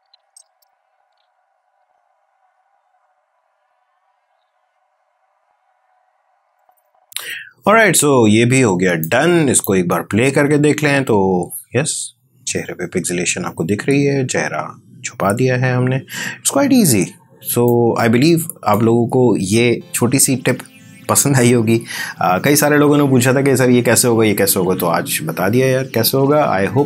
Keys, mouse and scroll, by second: 8.9-10.1 drag, 10.1 space, 17.5-18.9 drag.